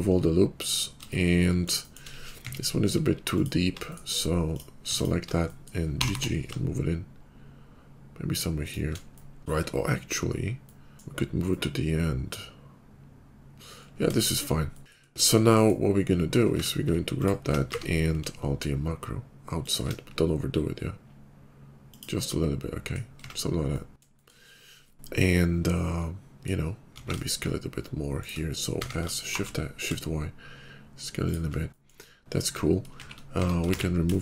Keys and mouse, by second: 2.3 Tab, 2.9 alt+click, 4.8 alt+click, 5.9 g, 11.4-16.4 middle drag, 16.4 Tab, 17.6 q, 19.8-23.1 middle drag, 23.1 Tab, 26.1 middle click, 26.8 s, 28.6 s, 31.7 click, 32.4 Tab, 32.8 shift+middle click, 33.0 shift+2, 33.3 Tab, 33.6 shift+2.